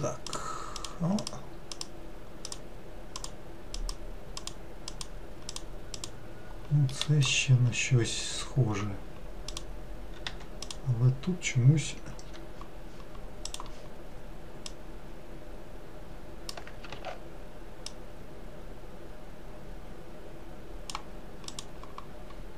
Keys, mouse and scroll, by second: 0.3 click, 0.8 click, 1.2 click, 1.7 click, 2.4 click, 3.1 click, 3.7 click, 4.4 click, 4.9 click, 5.5 click, 5.9 click, 6.9 middle click, 7.7-8.0 scroll up 2, 8.7 scroll up 5, 9.5 click, 10.2 2, 10.6 click, 13.5-14.8 drag, 16.9 ctrl+z, 17.9 click, 21.5 click, 22.3-22.5 scroll up 10.